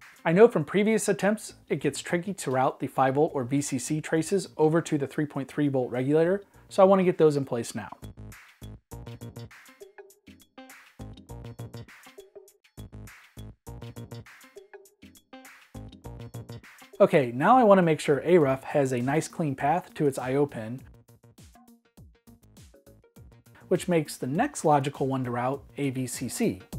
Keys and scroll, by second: 1.7 m, 3.9 m, 10.0 -, 18.6-19.8 typing.